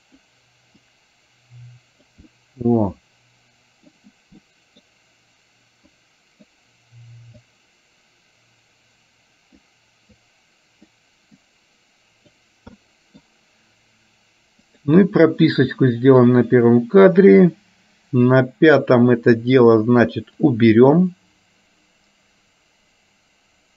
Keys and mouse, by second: 0.9-2.3 drag, 2.4-4.1 middle drag, 4.4 middle click, 5.9 click, 7.6-9.8 drag, 10.2 click, 11.4-12.4 drag, 12.8 middle click, 16.4-19.2 drag, 20.6-23.7 drag.